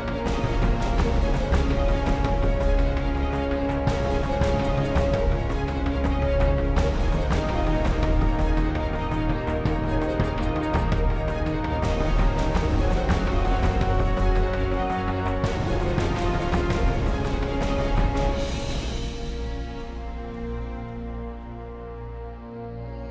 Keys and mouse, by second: 2.0 shift+a, 4.1 shift+a, 6.6-14.8 drag, 15.0 middle click, 20.6 KP_5.